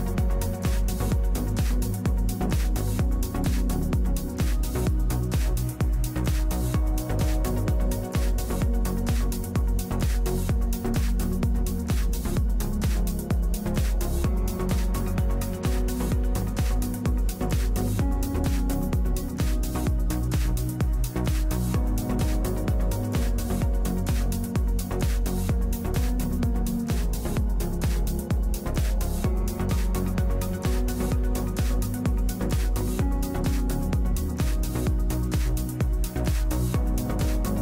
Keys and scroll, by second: 5.4 x, 12.4 x, 12.9 F3, 21.6 x, 29.7 f, 30.5 F3, 31.7 x, 37.0 z.